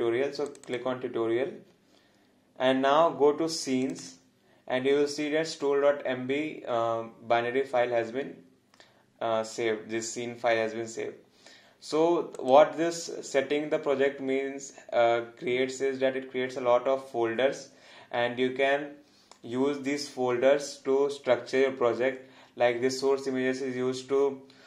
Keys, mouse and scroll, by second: 12.4 click.